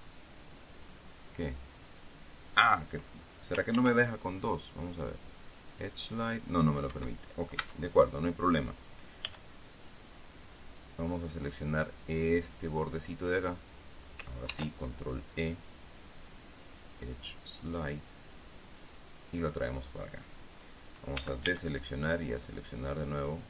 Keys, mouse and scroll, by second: 4.3 ctrl+e, 6.2 click, 7.4 Escape, 9.8 b, 15.0 ctrl+e, 17.6 click, 20.1 click, 20.4-21.7 middle drag, 21.7 a, 23.1-23.4 drag.